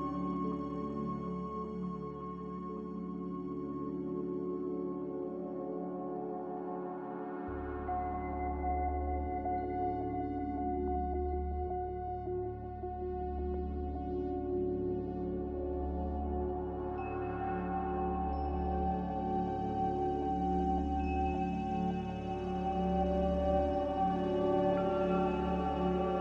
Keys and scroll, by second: 7.8 z, 9.7-11.7 typing, 19.6-20.5 typing, 24.3 5.